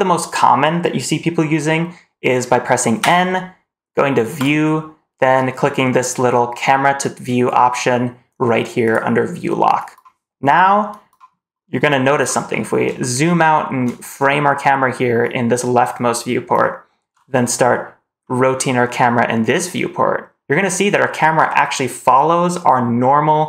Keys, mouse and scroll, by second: 2.9 n, 4.3 click, 8.7 click, 12.4-12.7 scroll down 1, 12.9-13.7 shift+middle drag, 18.1-20.6 middle drag.